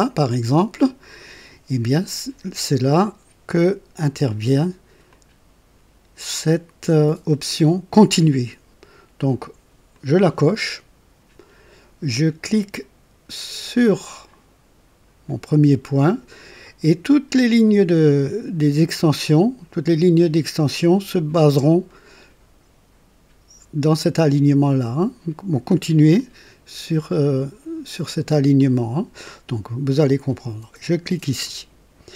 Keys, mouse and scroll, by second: 5.1 click, 9.9 click, 26.2-27.5 drag, 28.6 click, 31.4 click.